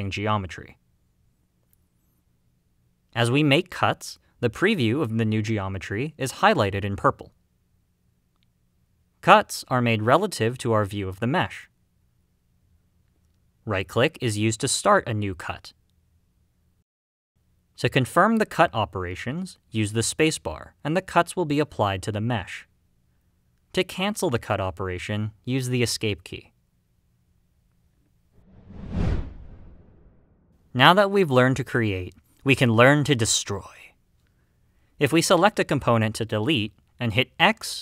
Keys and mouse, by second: 9.3-23.3 middle drag, 19.3 space, 23.8-26.0 drag, 25.8 Escape, 35.9 x.